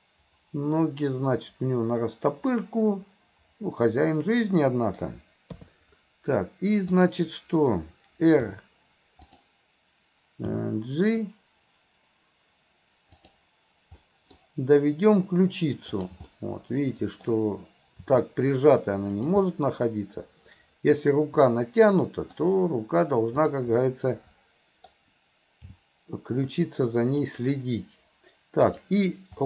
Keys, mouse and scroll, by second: 6.9 click, 8.5 r, 10.5 g, 14.0-14.4 middle drag, 15.9 click, 16.4-17.3 middle drag, 18.1 r, 19.5-22.4 middle drag, 23.5 click, 23.9-24.9 middle drag, 25.8 g, 28.6 click.